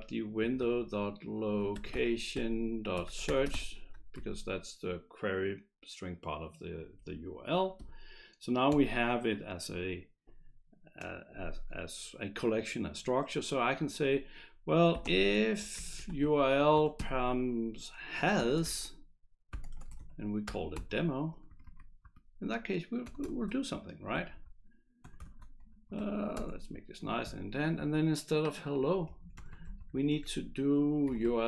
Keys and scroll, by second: 0.0-4.0 typing, 4.1 Right, 8.7 Return, 14.7-16.7 typing, 18.1-21.3 typing, 21.5 Right, 21.6 Right, 22.0 Right, 23.0 Return, 23.3 shift+[, 23.9 Delete, 24.1 Down, 24.3 Down, 25.0 Return, 25.7 Up, 25.7 shift+], 25.9 Left, 26.3 Tab, 29.2 BackSpace, 30.8-31.4 typing.